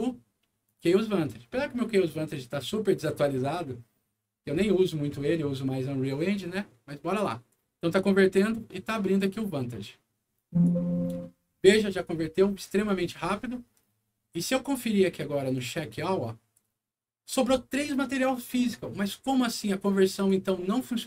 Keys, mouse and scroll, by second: 0.6 click, 10.3 click, 12.6 click, 15.5 click, 20.0 click.